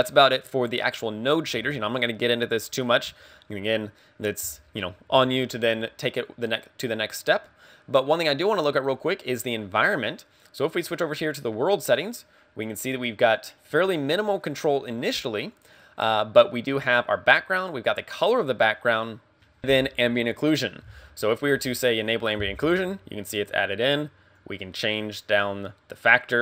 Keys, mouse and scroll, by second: 7.3 middle click, 11.9 click, 14.5 click, 15.6 click, 22.0 click, 24.4 click.